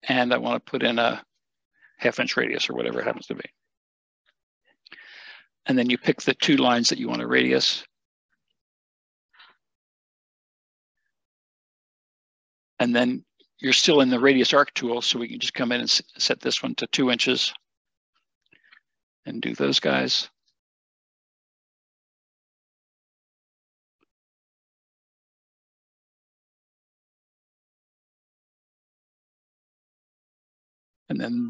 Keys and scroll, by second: 3.2 typing, 10.4 Escape, 17.7 2, 23.3 1, 28.2 Escape.